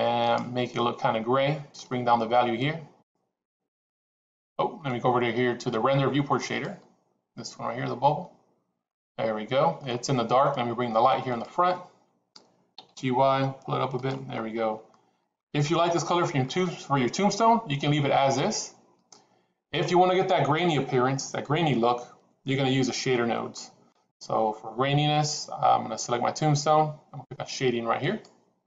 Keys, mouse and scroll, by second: 0.2 click, 7.8 click, 8.8-9.8 middle drag, 11.1 click, 12.6 g, 14.8-15.5 middle drag, 16.4 click, 17.2-19.6 middle drag, 23.4 middle click.